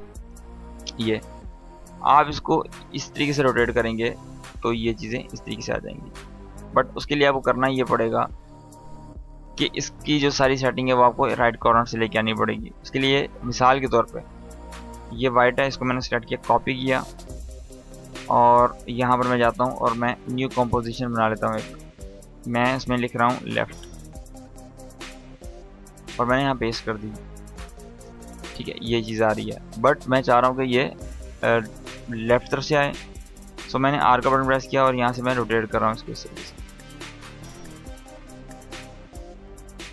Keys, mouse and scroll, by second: 1.1-3.0 drag, 8.5 ctrl+z, 14.1 click, 15.8 ctrl+c, 17.8 click, 24.5 Return, 26.9 scroll down 1, 27.7-28.3 drag, 30.9-31.5 drag, 33.1 r, 34.3-35.5 drag, 39.4 u.